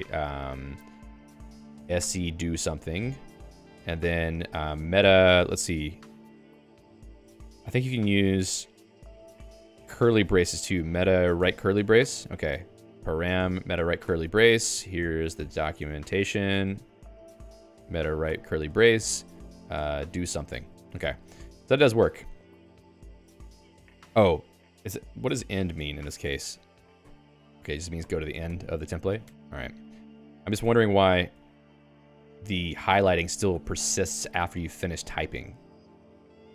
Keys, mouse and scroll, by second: 13.8 m, 18.7 alt+}, 21.3 ctrl+s, 29.7 Escape, 33.5 ctrl+s.